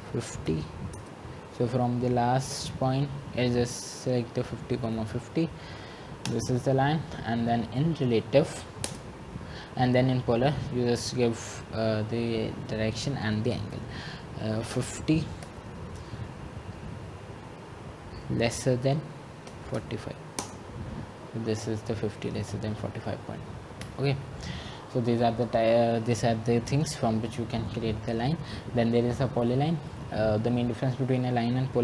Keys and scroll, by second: 1.2 typing, 6.6 Return, 9.2 Escape, 15.1 Return, 18.3-19.0 typing, 20.5-21.2 typing, 24.1 Return.